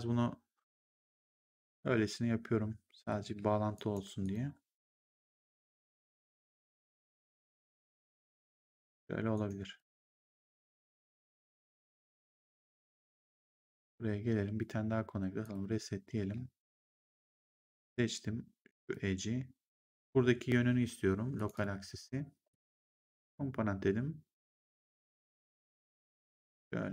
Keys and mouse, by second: 1.0 click, 1.4 middle click, 3.2 w, 3.6 right click, 4.1 click, 5.6 w, 6.4 click, 9.2 right click, 11.4 1, 13.1 right click, 13.7 click, 16.1 w, 17.4 click, 18.7 click, 21.2 click, 24.4 click.